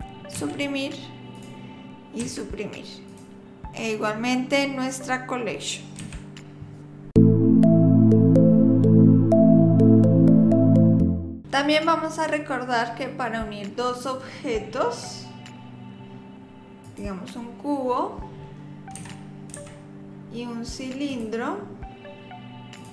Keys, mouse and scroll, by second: 0.4 Delete, 1.3 click, 2.2 Delete, 3.1 click, 6.0 Delete, 15.0 click, 19.0 g, 20.1 click, 21.1 click.